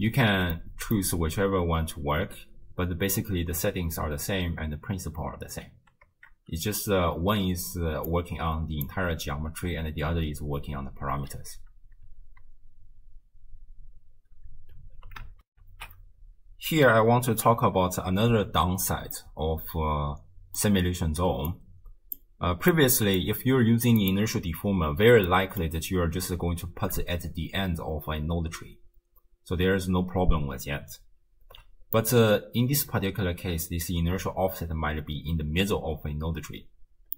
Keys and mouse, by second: 0.6 click, 6.4 space, 8.0 space, 8.1 click, 12.1 shift+space, 14.2 space, 15.5 ctrl+alt+shift+w, 15.9 ctrl+alt+shift+q, 19.2-20.7 middle drag, 21.5 click, 22.7 middle click, 24.0 right click, 24.9 m, 25.3 middle click, 31.5 m, 32.0 middle click.